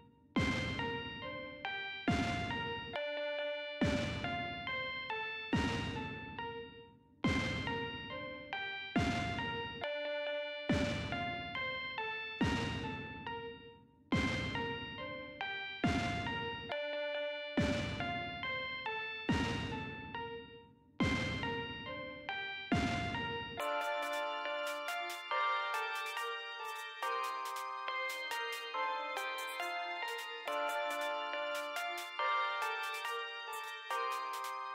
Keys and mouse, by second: 2.4-4.0 typing, 13.3 BackSpace, 15.4-17.5 typing, 26.0 click, 33.2 click.